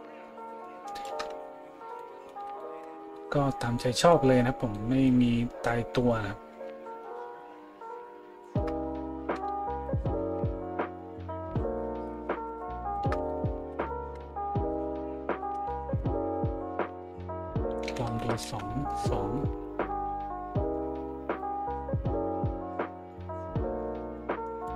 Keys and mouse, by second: 2.9 a.